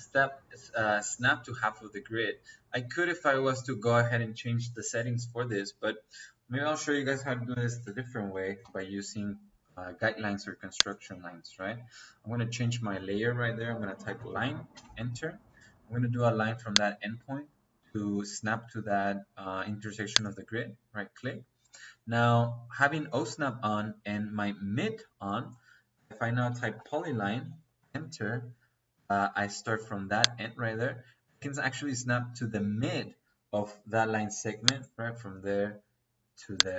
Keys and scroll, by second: 7.4 Escape, 13.3 Escape, 13.9-14.6 typing, 25.6 Escape, 26.4 p, 26.7 o, 27.0 l, 27.7 space.